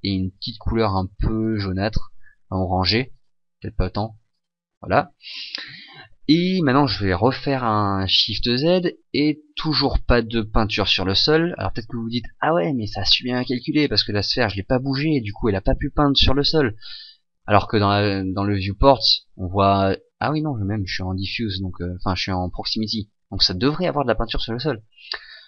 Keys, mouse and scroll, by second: 0.3 click, 3.1 click, 8.4 shift+z, 17.6 Escape, 18.9 shift+z.